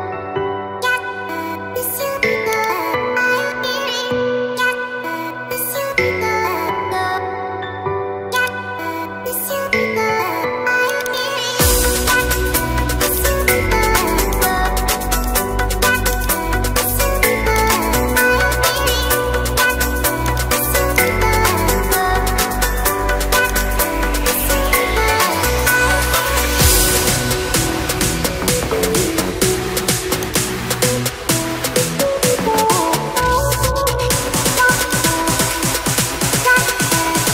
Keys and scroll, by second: 13.8 0, 19.6 0.